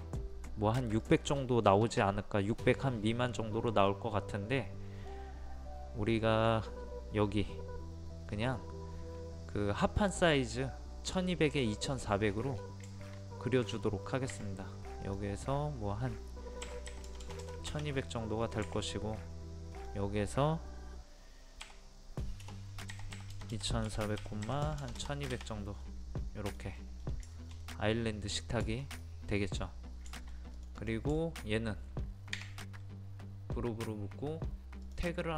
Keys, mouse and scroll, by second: 1.0 click, 3.9-5.7 middle drag, 8.3-9.1 scroll down 1, 9.3-9.8 scroll up 1, 9.8 middle click, 10.3-11.9 scroll up 1, 11.9 scroll down 1, 12.9 shift+middle click, 13.9 scroll up 1, 14.0 middle click, 15.1 click, 16.6 KP_1, 18.2 middle click, 19.7 click, 21.6 KP_1, 22.4 BackSpace, 22.9 KP_2, 25.8 middle click, 27.0 scroll down 1, 27.3 shift+middle click, 28.3 scroll up 1, 28.6 shift+middle click, 29.6-30.1 scroll up 1, 30.1 middle click, 30.5 click, 31.2 shift+middle click, 32.3 g, 34.9 click.